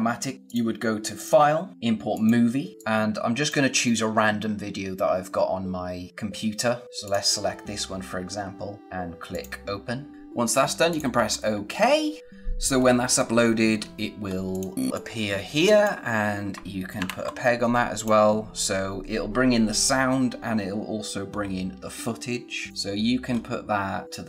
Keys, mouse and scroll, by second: 0.3 click, 2.0 click, 6.9 click, 9.2 click, 10.8 click, 13.7 scroll up 1, 14.5 click, 14.9 scroll up 1, 15.0 click, 17.0 ctrl+p, 17.9 click, 22.7 click, 22.9 scroll down 1, 23.2 scroll up 1, 24.0 click.